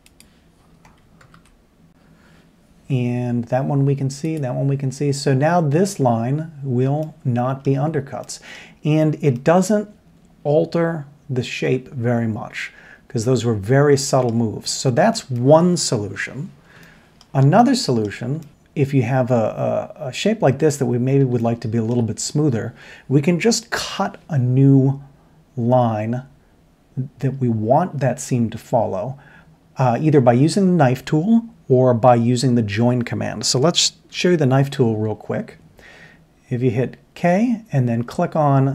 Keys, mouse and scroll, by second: 1.2 ctrl+KP_7, 7.0-7.6 middle drag, 8.2 middle click, 9.3-10.3 middle drag, 15.6 middle click, 16.2-16.7 scroll up 1, 16.8 shift+middle click, 17.5 middle click, 18.4 shift+middle click, 21.1 middle click, 21.4-21.9 shift+middle drag, 29.1 middle click, 34.1 k.